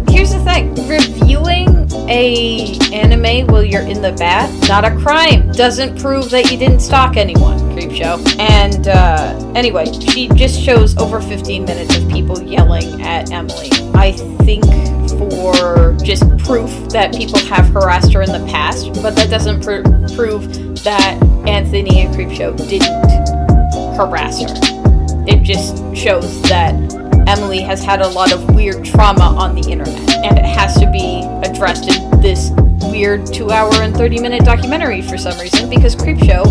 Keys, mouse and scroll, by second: 2.4 right click, 2.6 right click, 3.1 space, 5.3 [, 8.3 right click, 9.0 space, 21.2 space, 22.7 e, 23.0 p, 24.3 space, 25.4 space, 27.7 e.